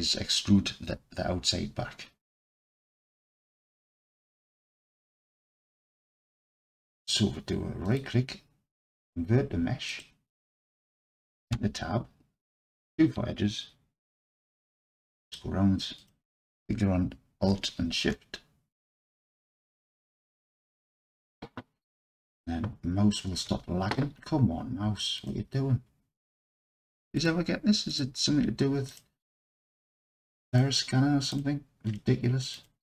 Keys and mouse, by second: 2.5-3.2 alt+drag, 3.9 alt+click, 8.0-10.0 drag, 11.6 Tab, 12.8 2, 14.9-15.3 alt+drag, 16.0 alt+click, 27.2-28.0 alt+shift+drag, 29.9 alt+shift+click, 30.5 alt+shift+click, 31.3-32.0 alt+shift+drag.